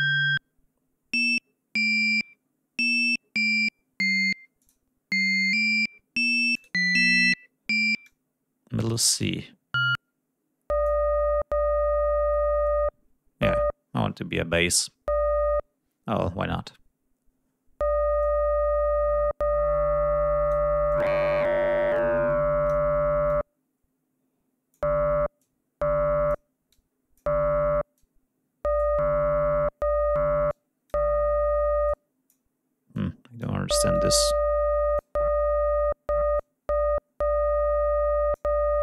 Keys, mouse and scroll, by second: 1.3-2.9 scroll up 1, 2.9-4.6 scroll up 1, 4.6 click, 6.5 click, 8.0 click, 9.2-11.0 drag, 18.2-20.7 drag, 20.9-22.9 drag, 23.2-24.9 drag, 25.4-26.5 drag, 26.7-27.3 drag, 27.9-29.0 drag, 30.5-31.0 drag, 31.8 click, 32.9-33.6 drag, 33.9-35.1 drag, 36.3-38.5 drag.